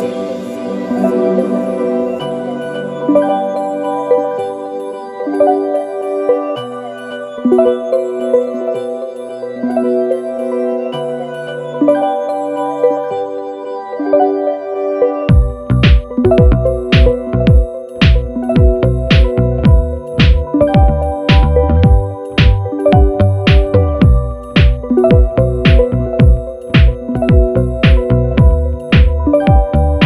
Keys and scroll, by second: 16.2 1, 19.4 super+-, 21.8 super+=.